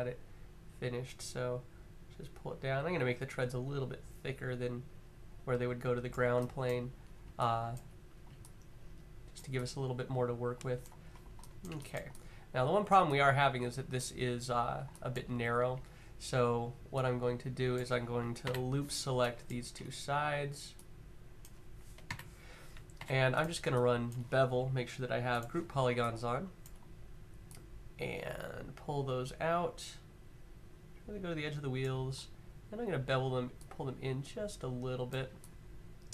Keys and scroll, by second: 15.0 q, 18.1 l, 21.8-22.7 typing.